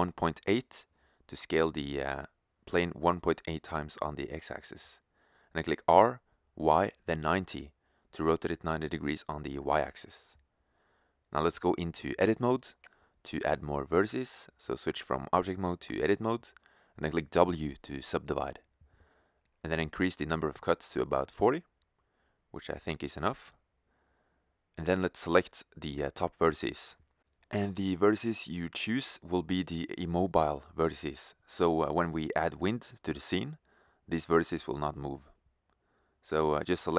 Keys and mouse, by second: 4.8 r, 10.2-12.9 middle drag, 14.1-17.0 drag, 17.0 w, 19.7-21.6 drag, 24.6-30.4 middle drag, 30.5-33.1 right drag, 33.9-35.8 right drag, 35.9-36.9 right drag.